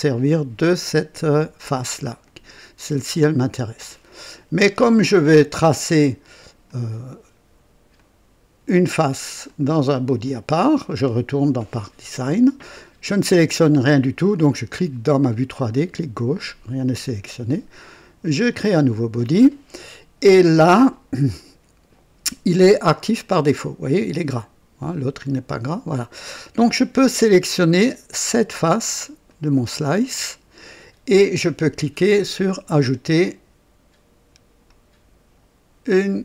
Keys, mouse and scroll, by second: 2.2-3.2 drag, 3.3 right click, 6.6 click, 7.9 click, 9.4 click, 15.7 click, 18.2 click, 23.1 click, 29.2 click, 33.1 click, 34.6 click.